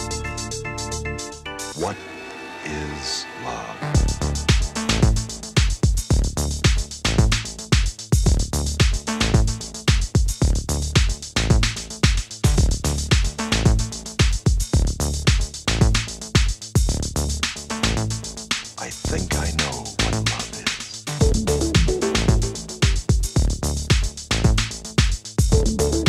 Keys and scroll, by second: 22.8 super+z.